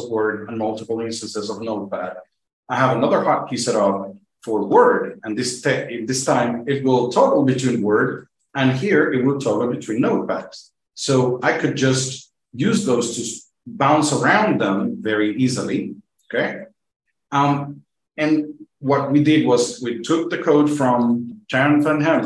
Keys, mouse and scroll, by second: 4.7 F1, 6.7 F1, 7.1 F1, 7.2 F1, 7.3 F1, 7.5 F1, 7.7 F1, 8.0 F1, 8.2 F1, 8.7 F2, 8.8 F2, 9.0 F2, 9.1 F2, 9.3 F2, 9.4 F2, 9.6 F2, 9.8 F2, 9.9 F2, 10.0 F2, 10.4 F2, 11.2 F2, 11.7 F1, 12.0 F1, 12.6 f, 14.3 F2, 14.5 F2, 14.9 F2, 15.1 F2, 15.2 F2, 15.5 F2, 16.4 F1, 16.6 F1, 17.0 F1, 20.8 F1, 20.9 super+'.